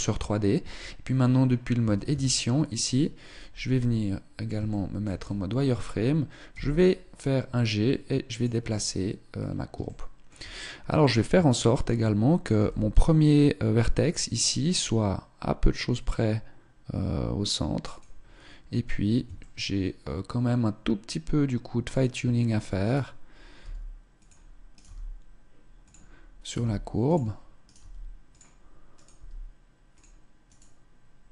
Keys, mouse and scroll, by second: 0.3 Tab, 1.4 a, 1.7 a, 3.1 z, 4.3 shift+middle click, 4.4 scroll down 2, 6.1 g, 8.4-9.2 scroll up 3, 8.9 shift+middle click, 9.9-10.2 scroll up 1, 10.8 shift+middle click, 10.8-11.1 scroll up 1, 12.2 g, 18.1-18.9 scroll down 2, 18.9 shift+middle click, 19.8 shift+middle click, 22.5 right click, 22.6 g, 24.3 right click, 24.5 g, 26.0 right click, 26.1 g, 27.3 right click, 27.4 g, 28.5 right click, 28.7 g, 29.6 click, 30.1 right click.